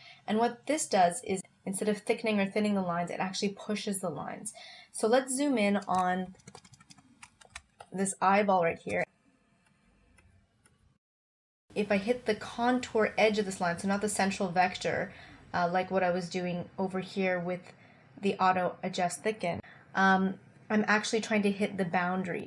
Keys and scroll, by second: 6.4 super+=, 7.6 space.